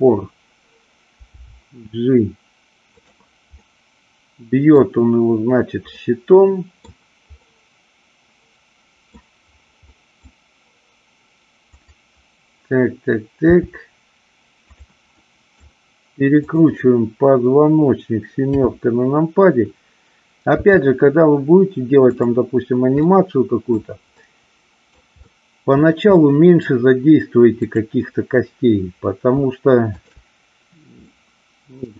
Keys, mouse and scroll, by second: 1.3 g, 2.9 click, 3.7-4.8 middle drag, 5.9-6.9 scroll up 1, 7.3-9.1 scroll up 1, 9.9-10.3 scroll up 1, 10.3 middle click, 13.5 g, 14.7 click, 15.2-15.5 middle drag, 16.3 click, 18.5 KP_7, 20.7 r, 23.1 middle click, 24.2 middle click, 25.2 middle click, 26.2-26.5 middle drag, 29.8 shift+click, 31.1-31.8 middle drag.